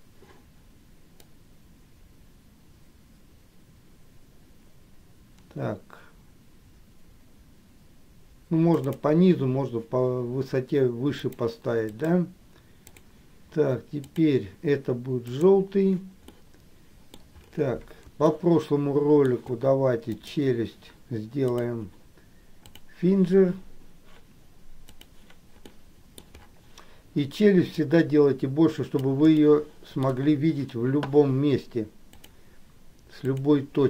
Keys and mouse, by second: 1.3-11.5 drag, 12.2 click, 13.0-14.4 drag, 15.4 click, 16.5 middle click, 18.5 shift+middle click, 21.6-23.0 drag, 25.7 middle click, 27.8-29.4 drag, 29.5 shift+middle click, 32.3 click, 33.4 click.